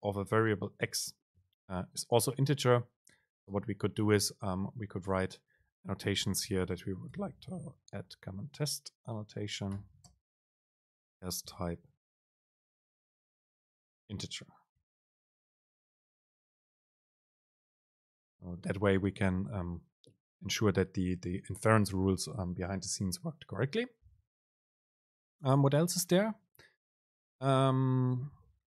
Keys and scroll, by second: 1.1 ctrl+shift+super+t, 10.3 super+space, 16.7 super+space, 16.8 Up, 26.5 super+space.